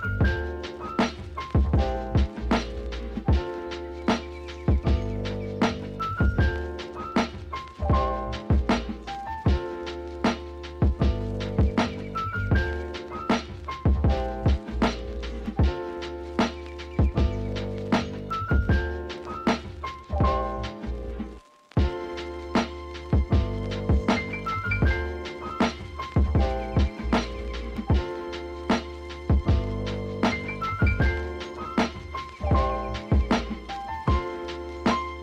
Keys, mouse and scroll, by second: 0.1-1.8 typing, 0.2 click, 1.2 Tab, 1.3 click, 1.5 Tab, 2.4 Tab, 4.1 scroll up 2, 4.2 Tab, 4.5 g, 5.1 Tab, 5.3 click, 7.7 scroll down 2, 7.9 click, 8.4 ctrl+c, 8.6 ctrl+v, 8.6 g, 11.6 s, 12.3 Tab, 12.5 a, 12.8 click, 13.0 Tab, 13.2 click, 13.4 click, 13.5 Tab, 13.8-16.9 typing, 18.3 Tab, 18.5-19.2 scroll down 1, 19.2 s, 19.9 g, 20.9-21.6 scroll down 2, 21.6 s, 24.8 s, 25.8 scroll up 2, 25.9-28.2 typing, 28.0 Tab, 28.8 Tab, 29.1-29.6 scroll up 1, 29.6 Tab, 29.9 click, 30.4-32.5 typing, 31.2 Tab, 31.3 click, 31.6 Tab, 33.8 g, 34.2 scroll up 1, 34.4 shift+middle click, 34.9 e.